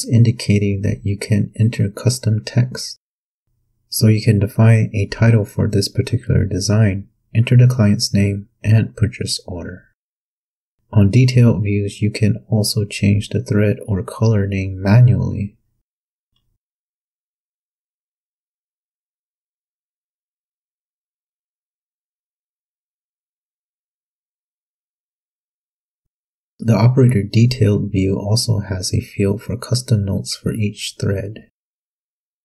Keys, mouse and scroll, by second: 0.7 click, 1.8-3.2 typing, 11.6 click, 12.2 scroll down 2, 13.2-13.6 scroll down 2, 13.7-14.9 scroll down 6, 19.1 click, 19.8 click, 22.2 Home, 22.5-24.1 typing, 25.1 click, 26.8 click, 28.6 shift+h, 28.9 shift+e, 29.4 shift+l, 30.6-32.4 typing.